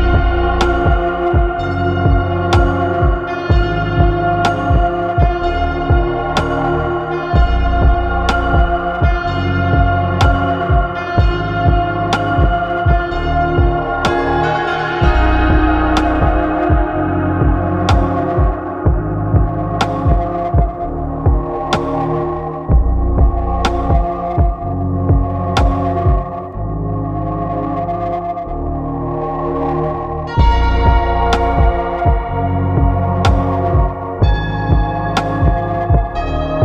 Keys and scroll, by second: 10.2 ctrl+z.